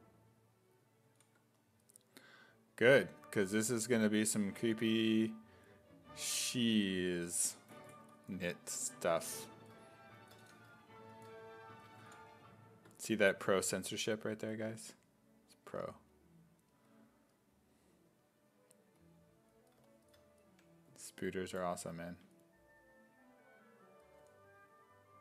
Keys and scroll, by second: 1.1 ctrl+z, 9.1 1, 10.4 w, 12.0 ctrl+z, 24.2 w.